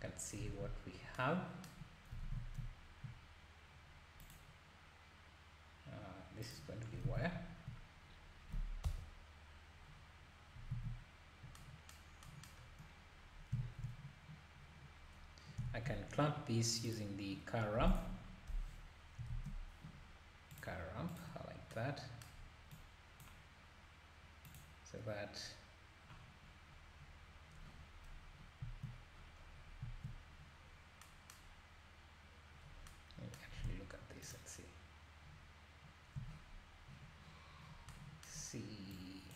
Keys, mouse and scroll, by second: 0.0-0.4 scroll up 2, 0.5 ctrl+s, 2.3 ctrl+s, 4.2-7.1 ctrl+shift+drag, 7.1 alt+a, 8.0-8.8 scroll down 1, 8.8 KP_0, 9.9-10.7 scroll down 1, 10.7 alt+a, 12.6-13.1 scroll up 3, 13.6 shift+a, 15.6 shift+a, 18.5 Delete, 19.3 shift+a, 21.2 shift+a, 22.7-29.1 drag, 26.4 scroll down 2, 27.5-28.0 scroll down 8, 28.6 `, 29.1-29.8 scroll down 9, 29.8 `, 30.6 scroll up 1, 32.4 scroll up 1, 32.6 scroll down 4, 34.4 ctrl+shift+click, 38.9 click.